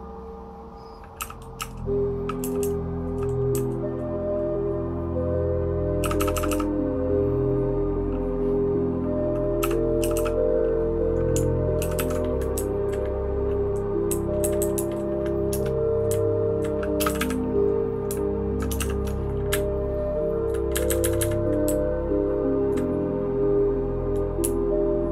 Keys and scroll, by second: 1.2-3.5 typing, 6.0 }, 6.2 }, 6.3 }, 6.5 }, 9.6 }, 10.0 }, 10.1 }, 11.8 ctrl+w, 11.9 ctrl+w, 12.5 Down, 14.1 Down, 14.4 Down, 14.6 Down, 14.7 Down, 15.5 Return, 16.1 Down, 17.0 space, 17.0 e, 17.2 e, 18.8 shift+g, 19.5 Up, 20.0-20.4 Up, 20.7 Up, 20.9 Up, 21.0 Up, 21.2 Up, 21.6 Down, 22.1-22.6 Down, 24.4 Up, 24.9 Up.